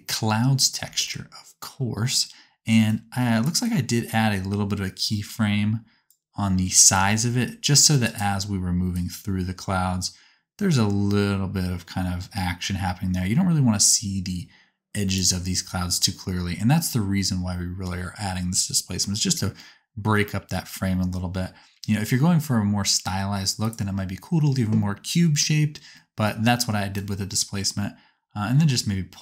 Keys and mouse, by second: 7.1 shift+middle click, 8.1 shift+middle click, 8.9-10.9 drag, 10.9 right click, 11.5-14.8 drag, 14.8 right click, 20.7-23.7 drag, 26.9 shift+click, 27.8-29.2 shift+middle drag.